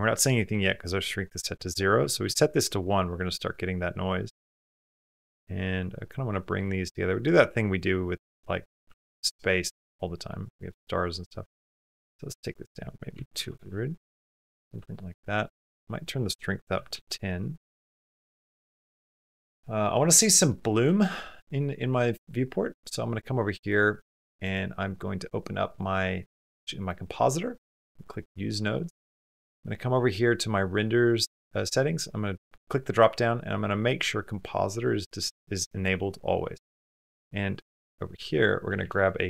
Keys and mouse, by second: 4.0 click, 8.3 middle click, 8.9 ctrl+middle click, 11.2 click, 13.3 KP_0, 14.2 ctrl+middle click, 15.1 middle click, 17.6 ctrl+middle click, 18.0 shift+middle click, 18.6 shift+middle click, 22.6 click, 24.3-26.6 drag, 27.9 click, 29.6 click, 31.6-33.8 drag, 36.3-37.4 middle drag, 37.6 middle click, 38.6 shift+a.